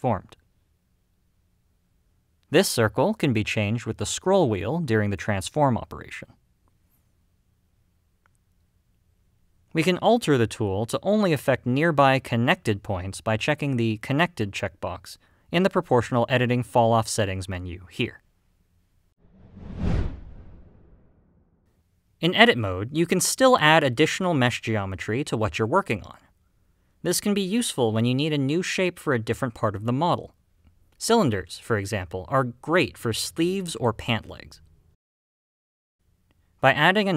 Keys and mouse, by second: 1.7 click, 2.7 click, 3.9 click, 5.4 g, 10.1 right click, 16.4 click, 18.2 g, 23.2-24.5 middle drag, 25.1 g, 25.9 click, 26.2 middle click, 27.0 g, 27.4 click, 27.7 middle click, 28.8 r, 29.8 click, 30.1 s, 30.7 click, 31.0 g, 31.4 click, 31.7 middle click, 32.9 g, 33.5 click, 33.8 s, 34.3 click, 34.7 middle click, 35.8 g, 36.2 click, 36.5 middle click.